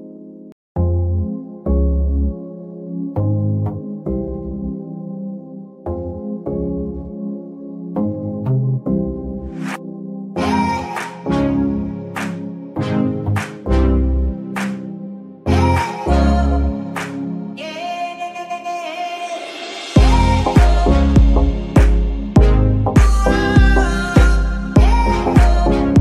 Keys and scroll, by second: 3.4 ctrl+Tab, 11.3 g, 11.6 Escape, 14.5 r, 14.6 x, 15.4 Escape, 17.7 g, 18.0 Escape, 20.9 r, 21.0 x, 21.6 Escape, 24.0 g, 24.2 Escape.